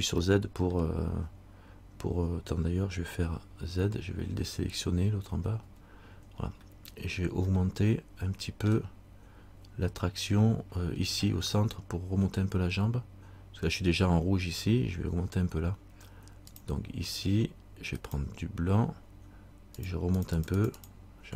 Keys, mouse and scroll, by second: 0.4 middle click, 3.6 z, 5.8 z, 6.6-7.6 scroll up 1, 7.7 middle click, 16.7 click, 19.9 click.